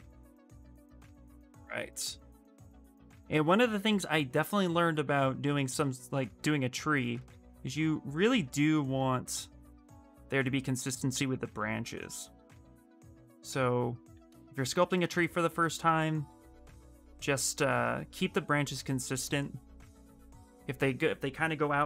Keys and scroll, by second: 0.4 s, 8.7 s.